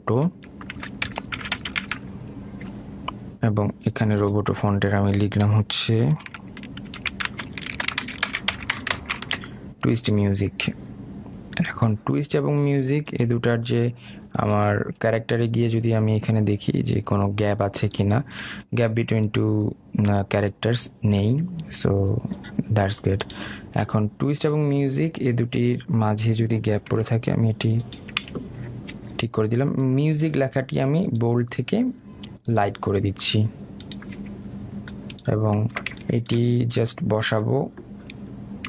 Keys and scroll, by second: 28.3 Delete.